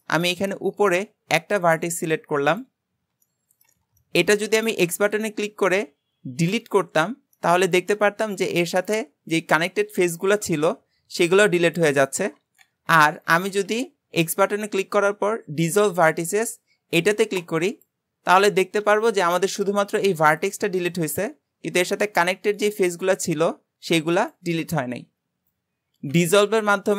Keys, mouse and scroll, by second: 0.7-1.6 scroll up 1, 1.6 click, 2.5 click, 2.8-3.3 scroll up 1, 3.3-4.8 shift+middle drag, 4.8 x, 7.4-12.7 middle drag, 18.6-26.2 middle drag.